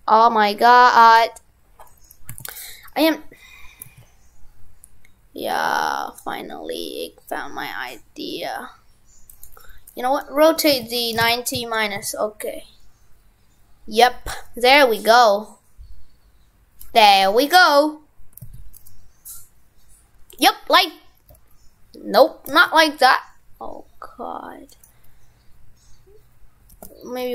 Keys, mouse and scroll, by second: 1.2 right click.